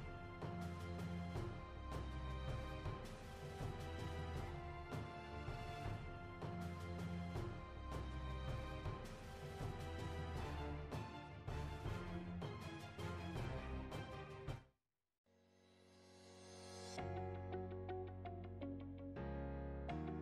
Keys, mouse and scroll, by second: 0.0 alt+click, 0.0 ctrl+r, 0.1 alt+click, 0.2 ctrl+r, 0.3 alt+click, 0.5 scroll down 2, 0.8 alt+click, 0.8 shift+right click, 1.0 alt+click, 1.1 scroll up 2, 1.2 alt+click, 1.2 alt+middle click, 1.3 alt+click, 1.5 shift+click, 1.6-6.3 typing, 2.0 alt+click, 2.4 alt+click, 2.5 alt+middle click, 2.5 alt+click, 2.9 alt+middle click, 3.0 alt+click, 3.2 alt+click, 3.3 alt+click, 3.5 alt+click, 3.7 alt+click, 3.8 alt+middle click, 4.2 alt+middle click, 4.4 alt+click, 4.5 alt+middle click, 4.6 alt+click, 4.7 scroll up 2, 5.1 alt+click, 5.2 alt+click, 5.3 alt+middle click, 5.3 alt+click, 5.6 alt+click, 5.6 scroll up 1, 5.8 click, 5.9 alt+click, 6.0 alt+middle click, 6.1 alt+click, 6.2 alt+click, 6.4 alt+click, 6.4-6.8 scroll down 2, 6.5 alt+click, 6.6 alt+middle click, 6.8 alt+click, 6.8 alt+middle click, 7.3 alt+middle click, 7.4-8.5 typing, 7.4 alt+click, 7.6 alt+middle click, 8.0 shift+right click, 8.4 click, 8.6 alt+middle click, 8.7 shift+click, 8.7 shift+right click, 8.9 alt+middle click, 9.0 ctrl+r, 9.2 ctrl+r, 9.3 ctrl+r, 9.5 alt+click, 9.5 alt+middle click, 9.7 scroll down 2, 9.7 alt+middle click, 9.8 alt+click, 9.8 scroll up 3, 9.9-20.2 typing, 10.0 click, 10.1 alt+click, 10.2 alt+middle click, 10.7 alt+click, 10.8 scroll up 1, 11.0 alt+click, 11.6 alt+middle click, 11.7 scroll up 1, 11.9 alt+click, 12.0 ctrl+r, 12.1 alt+click, 12.6 alt+click, 13.0 alt+click, 13.2 scroll down 3, 13.2 alt+click, 13.4 alt+click, 13.5 alt+middle click, 14.1 alt+click, 14.2 alt+middle click, 14.2 scroll down 1, 14.2 alt+click, 14.3 scroll up 2, 14.3 alt+click, 14.4 alt+middle click, 14.5 alt+click, 14.8 alt+middle click, 15.1 alt+click, 15.3 alt+middle click, 15.8 alt+click, 16.3 alt+middle click, 16.5 alt+click, 16.7 alt+click, 16.7 alt+middle click, 16.8 alt+click, 17.0 alt+click, 17.3 alt+click, 17.6 alt+click, 18.5 alt+click, 18.5 alt+middle click, 18.6 click, 18.7 alt+middle click, 18.8 alt+click, 18.9 scroll down 2, 19.0 alt+click, 19.0 alt+middle click, 19.2 click, 19.6 shift+right click, 19.7 alt+middle click, 19.7 alt+click, 19.8 scroll up 1, 20.1 click.